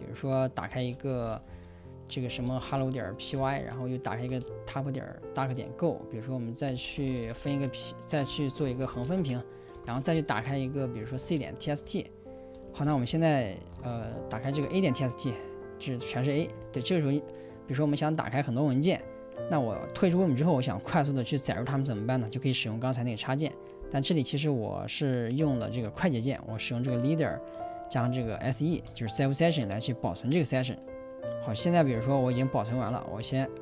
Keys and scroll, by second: 0.0-5.3 typing, 3.6 ctrl+l, 7.0 ctrl+l, 7.0-17.5 typing, 8.5 Escape, 28.2-29.4 typing, 32.2-33.4 typing.